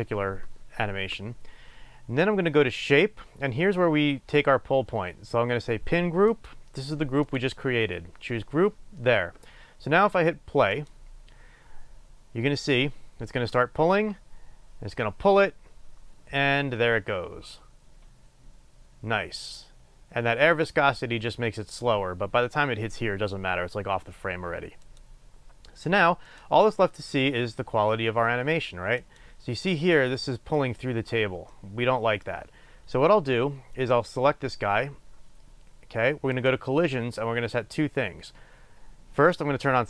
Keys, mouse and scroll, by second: 1.6-3.0 scroll up 1, 3.3-4.0 scroll down 1, 6.4-13.6 drag, 20.7 click, 24.8 click, 26.3-29.7 drag, 29.7-36.4 middle drag, 36.4-38.1 drag.